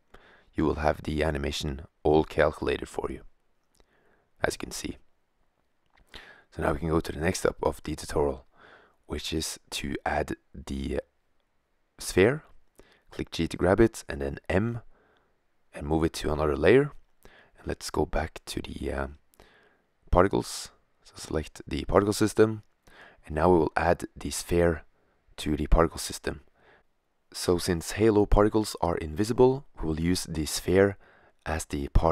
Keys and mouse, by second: 3.1 click, 3.7-4.6 drag, 8.2 shift+a, 11.6 g, 13.5-14.4 drag, 14.0 m, 16.0-17.4 right drag, 17.8-18.7 right drag, 19.8 middle click, 20.7 middle click, 20.8 middle click, 21.2 click, 22.5-23.9 middle drag, 23.9-26.7 drag.